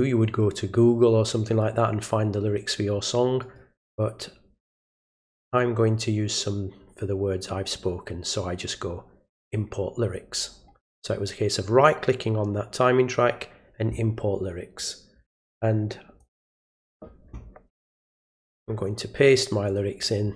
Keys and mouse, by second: 3.4 right click, 9.4 click, 14.8-16.2 drag, 19.7 ctrl+click.